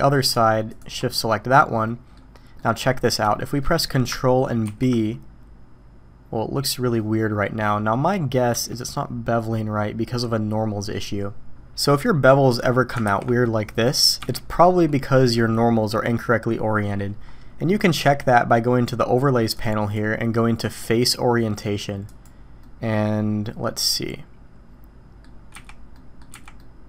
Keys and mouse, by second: 1.2-2.1 middle drag, 2.6 middle click, 3.3-3.6 shift+middle drag, 4.6 ctrl+b, 8.8-10.2 drag, 12.0 click, 13.0 ctrl+b, 14.7-15.2 drag, 17.9 middle click, 19.6-22.4 drag, 22.6-25.2 middle drag, 25.5 z, 25.9 middle drag, 26.3 z, 26.6-26.8 middle drag.